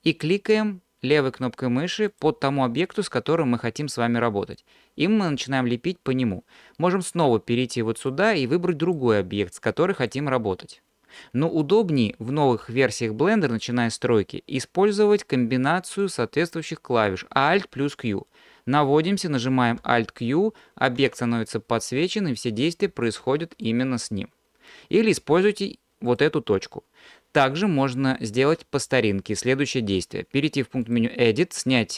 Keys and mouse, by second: 4.6-8.9 drag, 9.5-12.5 drag, 16.0-18.4 drag, 19.9 alt+q, 21.0 alt+q, 22.3 click, 23.3 alt+q, 23.6 click, 25.5-26.1 drag, 30.8-31.9 drag.